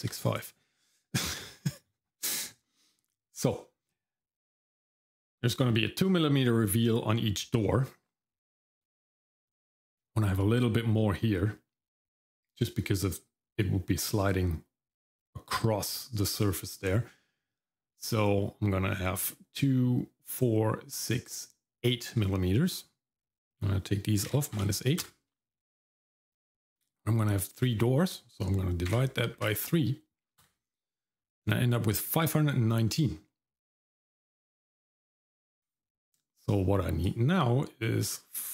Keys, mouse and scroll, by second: 37.0-38.5 drag.